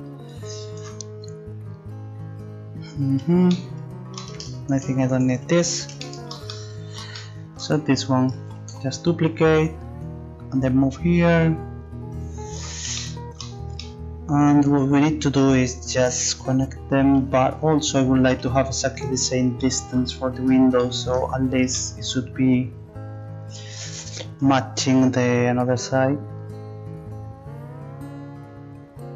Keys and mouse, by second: 4.7-8.4 right drag, 8.4 shift+d, 10.2-11.8 drag, 17.2 KP_3, 18.4 KP_1, 24.4 middle click.